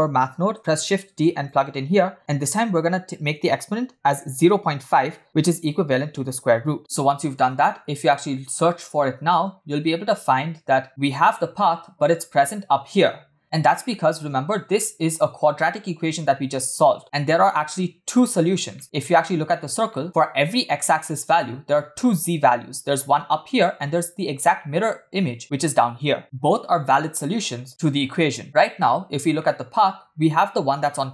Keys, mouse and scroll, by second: 0.4 shift+d, 2.4-4.8 drag, 6.3 click, 8.6-9.9 middle drag, 10.0 shift+middle click, 11.2-11.7 scroll up 1, 11.7-12.2 scroll down 2, 13.9 shift+middle drag, 14.3-14.6 scroll up 2, 14.8-15.2 shift+middle drag, 17.0 scroll up 1, 17.2 shift+middle click, 18.7 shift+middle click, 18.9-19.5 scroll up 2, 19.9 shift+middle click, 20.0-21.4 scroll up 1, 28.5-28.8 scroll down 3, 29.3 scroll down 2, 29.4-30.0 shift+middle drag, 30.0-31.1 scroll down 1.